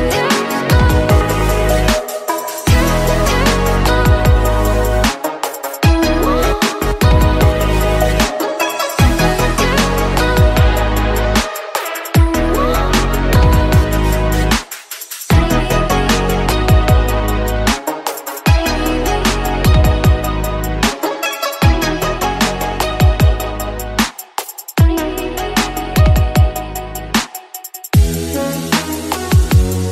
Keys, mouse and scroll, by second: 0.1 click, 1.0-2.3 middle drag, 2.3 click, 3.0-4.1 middle drag, 4.1 Tab, 4.8 Tab, 7.2-8.0 middle drag, 8.0 KP_1, 8.6-9.2 scroll up 3, 9.2 shift+middle click, 9.9 z, 11.3 click, 12.0 click, 13.5 click, 15.6 a, 19.0 ctrl+z, 19.4 click, 20.5 c, 22.8 c, 24.1 click, 25.7 click, 26.4 c, 28.6 click.